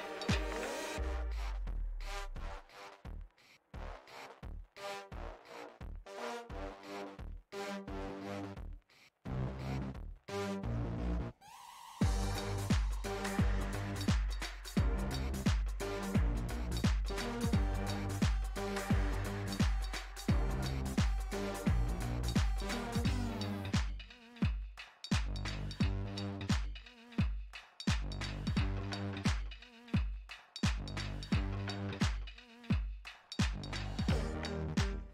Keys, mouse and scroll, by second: 0.2 click, 1.1 middle click, 1.6 f, 2.8-5.4 drag, 5.4-6.9 middle drag, 6.9 ctrl+z, 7.0-11.8 drag, 13.0-16.6 middle drag, 16.6-21.4 drag, 22.9-25.2 middle drag, 25.2-27.8 drag, 28.5 click, 29.4-32.8 middle drag, 32.8-33.9 drag, 33.9-35.1 middle drag.